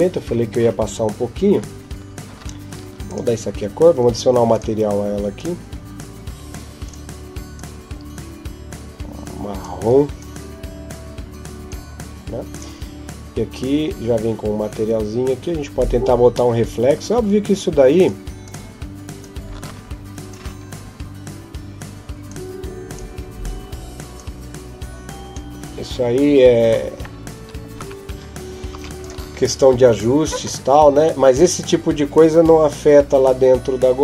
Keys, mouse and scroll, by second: 2.1 F12, 2.1 Escape, 2.9 right click, 4.3 click, 5.2 click, 12.3 right click, 16.1-17.8 scroll down 8, 17.8 click, 18.2 click, 27.2 F12, 27.2 Escape, 27.2 click, 28.5 ctrl+s.